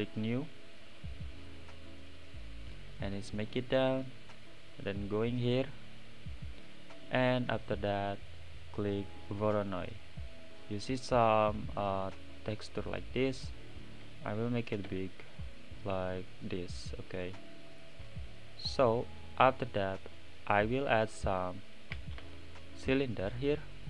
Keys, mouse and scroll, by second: 1.9-4.8 drag, 5.6-10.1 drag, 10.1-10.9 scroll down 1, 10.9 scroll up 8, 12.0-13.4 middle drag, 13.4 click, 16.7 s, 19.4-19.9 middle drag, 22.6 middle click, 22.9 shift+a.